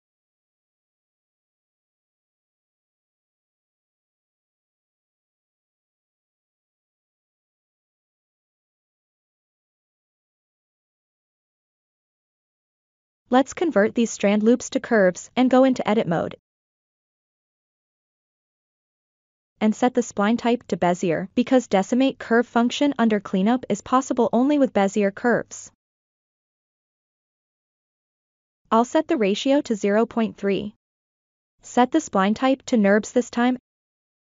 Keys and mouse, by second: 0.6 l, 1.6 p, 3.2 l, 4.1 p, 6.1 Tab, 7.1-7.6 middle drag, 8.2 click, 9.1 click, 9.5-9.9 middle drag, 10.1-10.5 ctrl+middle drag, 10.7 shift+middle drag, 11.2-11.7 drag, 13.2 q, 16.7 Tab, 18.7-22.5 drag, 24.9-27.7 drag, 29.0-30.3 drag, 32.0-34.1 drag.